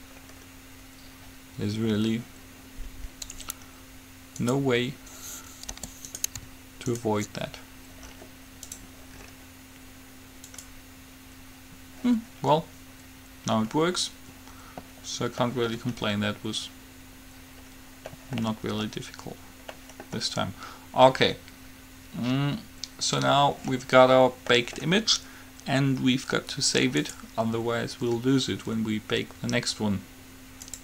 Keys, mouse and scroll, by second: 4.7-6.5 drag, 5.9 g, 7.2-9.0 right drag, 8.7 middle click, 8.8-12.5 drag, 13.8-18.6 middle drag, 24.7-26.5 middle drag, 27.2-28.9 drag.